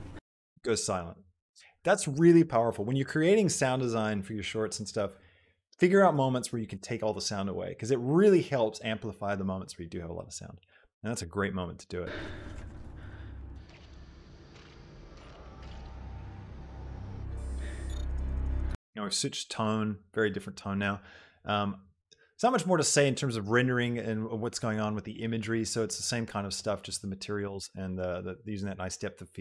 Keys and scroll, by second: 0.3 space, 12.0 space, 19.0 space.